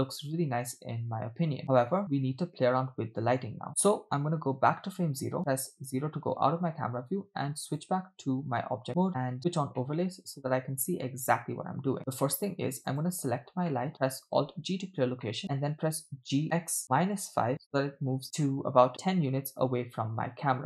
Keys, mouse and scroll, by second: 0.0-1.0 typing, 2.1 space, 3.9-4.8 drag, 5.5 KP_0, 7.8 click, 9.8-12.0 middle drag, 12.9 click, 13.7 middle drag, 14.6 alt+g, 15.2 middle drag, 16.3 g, 18.2-19.4 middle drag, 19.8-20.4 scroll up 3.